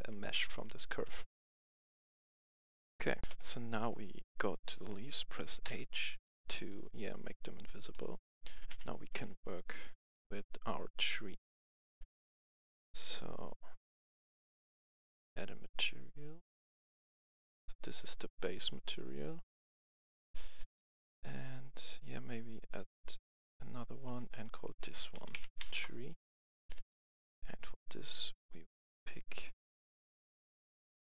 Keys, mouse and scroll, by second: 1.0 Tab, 2.1 Tab, 2.4-2.8 typing, 3.2 scroll down 1, 3.3 F10, 3.9-4.9 right drag, 5.6 h, 7.8 middle click, 8.6 KP_1, 9.0 Tab, 9.9 right click, 14.1-17.9 drag, 25.1-25.5 typing, 25.6 Return, 26.9-31.1 drag.